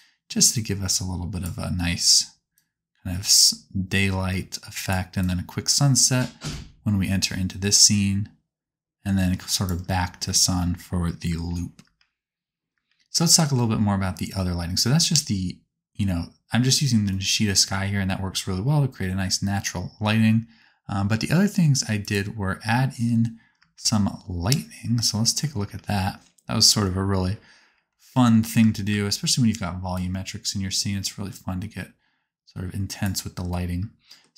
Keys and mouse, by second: 0.6-4.9 drag, 5.9-9.7 drag, 9.9-12.8 typing, 22.1 middle click, 23.6 space, 25.4 space, 25.6 space, 26.8 space, 28.6 space, 29.0 click, 29.0 space, 29.5 middle click, 29.9 click.